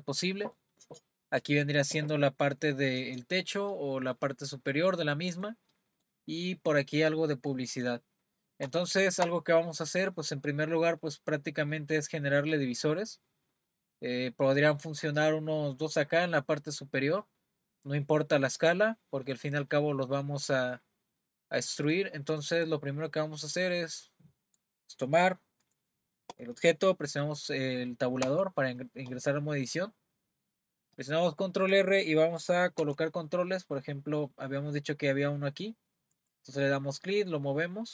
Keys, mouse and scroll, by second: 0.5-3.6 middle drag, 4.1-8.1 middle drag, 8.1-8.8 scroll up 2, 8.8-12.8 shift+middle drag, 21.9-25.0 middle drag, 25.6 click, 28.2 Tab, 32.8 r.